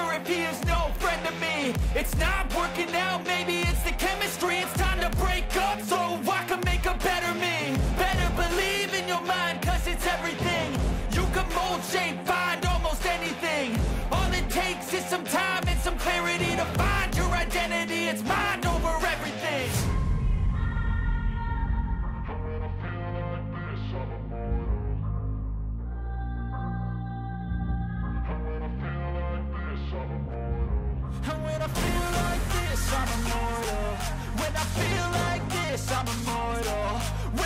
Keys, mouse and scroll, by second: 7.6 double click, 22.8 click, 27.5 ctrl+=, 28.0 ctrl+=, 28.9 ctrl+-, 29.2 ctrl+=, 30.6 ctrl+-.